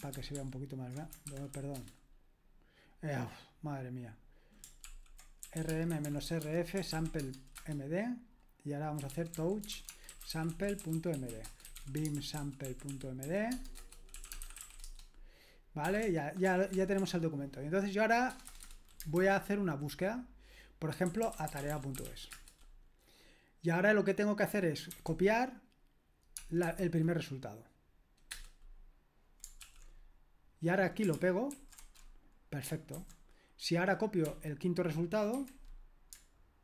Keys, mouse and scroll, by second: 0.1 typing, 0.4 ctrl+alt++, 1.3-2.1 typing, 4.9 ctrl+l, 5.2-7.4 typing, 7.5 Return, 8.7-17.0 typing, 18.3 Return, 18.5 typing, 19.1 super+h, 20.8-22.6 typing, 24.9 c, 26.6 1, 28.3 Return, 29.6 super+l, 31.5 ctrl+alt+v, 32.9 super+h, 34.3 typing, 35.3 typing.